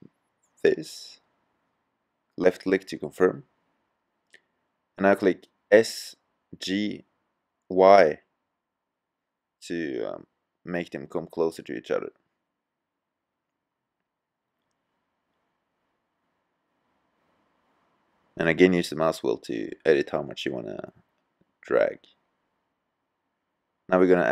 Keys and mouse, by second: 3.5-5.2 middle drag, 5.2 g, 8.6 click, 9.6 g, 19.4 middle click, 20.8 Tab.